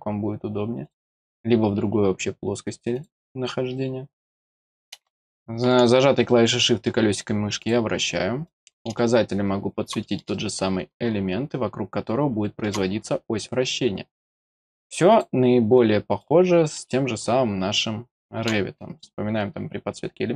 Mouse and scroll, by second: 0.8 click, 2.9-7.7 drag, 4.2 scroll down 1, 5.0 middle click, 6.2 middle click, 8.4 click, 8.9-10.0 middle drag, 10.3-12.6 middle drag, 12.9 scroll down 1, 15.1 click, 16.1 click, 16.8-18.4 middle drag.